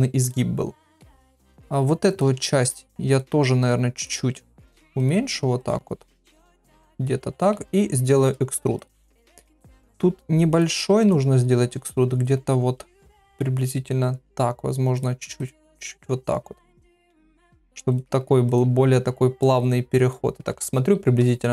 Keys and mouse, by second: 0.2 click, 2.1 click, 2.3 g, 3.6 click, 3.7 g, 4.4 click, 4.6 g, 5.6 click, 5.7 g, 7.7 e, 8.9 g, 11.0 click, 11.2 g, 15.5 g, 17.2 g, 18.6 g.